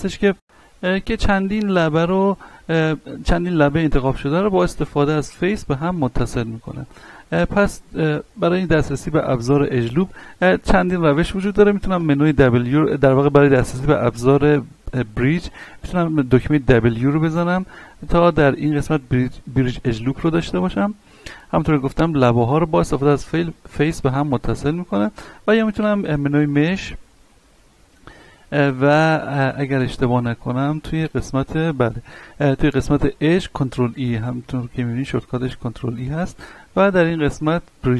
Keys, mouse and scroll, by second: 5.9-7.3 middle drag, 7.3-8.1 scroll down 1, 9.9-10.5 scroll up 1, 11.9 w, 16.7 w, 26.1 click.